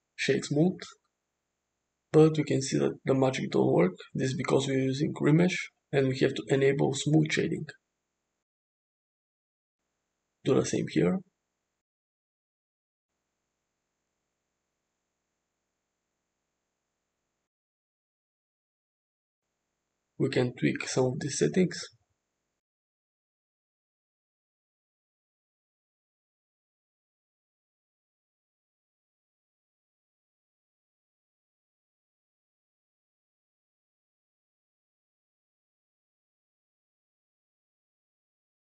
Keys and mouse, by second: 0.7 right click, 5.6 click, 6.9 click, 9.7 alt+h, 11.0 click, 12.7 click, 13.3 shift+middle click, 14.2 middle click, 15.0-18.2 middle drag, 18.6 click, 21.4 click, 22.5-23.7 shift+drag, 24.5-28.3 shift+drag, 29.8 click, 30.3 click, 32.2-33.1 middle drag, 33.6-35.4 middle drag, 36.4 click, 38.0 click.